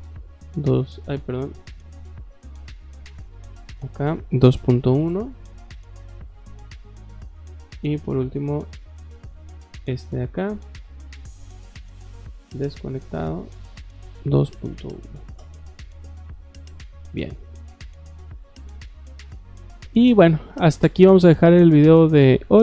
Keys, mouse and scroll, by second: 2.0 Escape, 2.5 Escape, 2.9 click, 3.6 click, 6.7 scroll down 2, 7.0-7.6 scroll up 4, 9.7 click, 11.3 click, 12.2 click, 12.9 click, 13.4 click, 17.0 Escape, 17.2 Escape, 17.4 Escape, 17.5 Escape, 17.6 scroll down 2, 17.8 middle click, 19.3 middle click, 20.0 middle click, 20.7 scroll up 2.